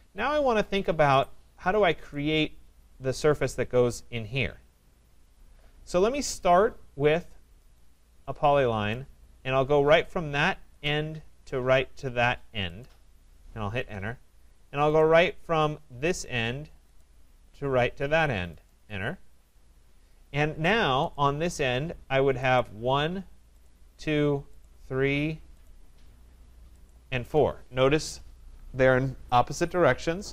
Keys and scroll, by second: 13.7 Return, 19.3 Return.